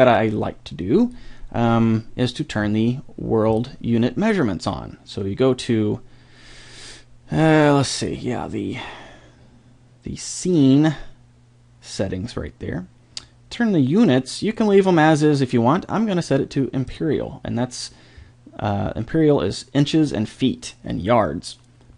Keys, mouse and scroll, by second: 0.1 click, 0.2 middle click, 0.3 click, 0.4 middle click, 0.8-2.0 drag, 3.5 click, 16.9-18.5 drag, 18.6 click.